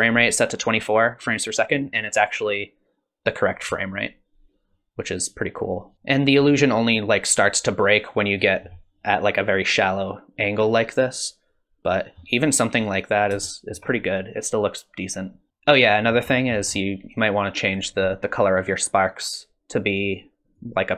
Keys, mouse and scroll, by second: 5.9 middle click, 6.2 scroll up 1, 6.6 middle click, 10.7 middle click, 13.5 shift+middle click, 15.5 scroll up 9, 16.1-17.7 scroll up 3, 16.3 middle click, 17.7 click, 17.7-19.2 scroll up 1.